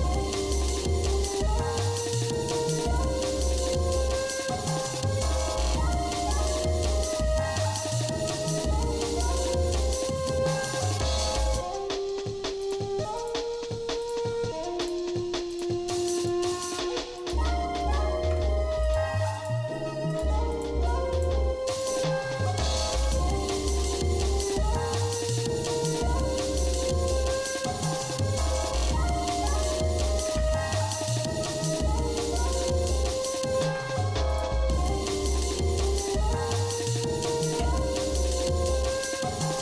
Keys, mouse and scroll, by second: 0.7 scroll up 2, 1.2 scroll down 1, 1.8 click, 2.3 alt+shift+click, 3.0 alt+shift+click, 4.3 ctrl+b, 7.0 middle click, 7.9 middle click, 8.8 middle click, 10.4 scroll down 1, 10.9 shift+middle click, 11.5 middle click, 12.6 click, 14.0 alt+shift+click, 14.8 click, 15.5 alt+shift+click, 16.2 alt+shift+click, 17.3 alt+shift+click, 18.2 ctrl+Tab, 19.4 click, 20.1 alt+shift+click, 20.5 click, 21.2 alt+shift+click, 21.8 alt+shift+click, 23.0 e, 25.3-26.9 shift+middle drag, 27.1 shift+middle click, 27.8 shift+middle click, 28.5 shift+middle click, 29.7 scroll up 1, 30.2 ctrl+Tab, 32.8 click, 33.6 ctrl+Tab, 34.8 click, 35.9 click, 36.7 click, 37.5 KP_7, 38.5-39.1 scroll up 4.